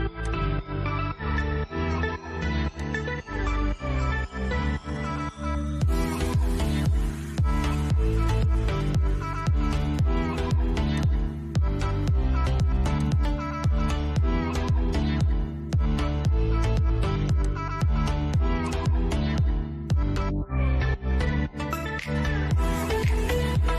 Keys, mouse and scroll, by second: 2.0 click, 3.3-4.1 scroll up 1, 9.2 middle click, 10.1 click, 10.2 click, 16.7 click, 20.8 click.